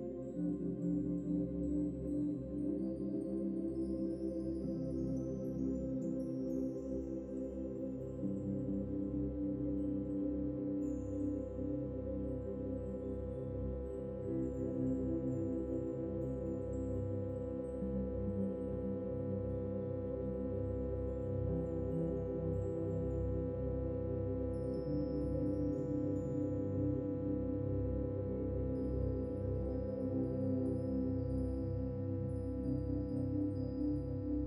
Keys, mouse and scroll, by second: 0.3 scroll up 1, 0.5 shift+middle click, 1.3 scroll up 2, 5.2 click, 6.4 shift+click, 6.9 shift+click, 9.7 shift+middle click, 10.4 shift+click, 12.1 shift+Left, 12.2 ctrl+l, 13.2 ctrl+l, 19.6 Tab, 20.0 Tab, 20.2 scroll down 6, 20.6 click, 20.8 scroll up 2, 21.3 click, 22.4 ctrl+s, 25.4-26.5 middle drag, 26.5-28.1 drag, 28.1-29.8 middle drag, 29.8-31.3 drag.